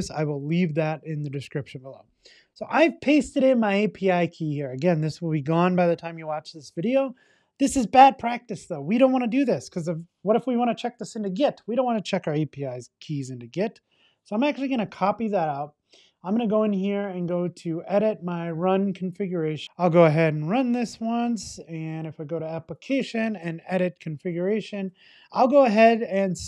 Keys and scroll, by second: 13.3 alt+shift+Left, 14.9 super+x.